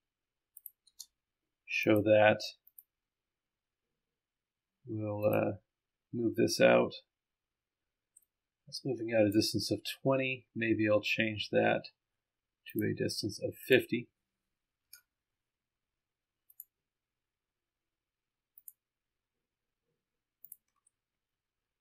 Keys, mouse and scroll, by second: 0.6 click, 1.2 space, 1.3-1.7 scroll down 1, 1.8 click, 2.7 click, 5.2 click, 8.2-9.7 drag, 13.7 click, 16.6 click, 18.6 ctrl+click, 20.5 ctrl+click, 20.8-21.5 ctrl+scroll down 1, 21.5-21.8 scroll up 1.